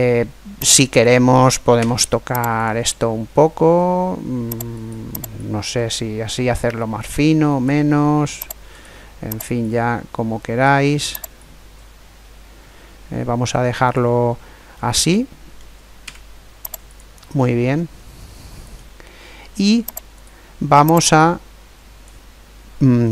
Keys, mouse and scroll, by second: 0.7 right click, 1.5 Tab, 4.5 right click, 5.1 click, 8.4 right click, 9.4-12.9 drag, 14.5-16.3 middle drag, 15.8 Tab, 17.1-19.0 middle drag, 19.9-21.6 right drag, 21.0-22.7 drag, 21.7 middle click, 22.9-23.1 middle drag.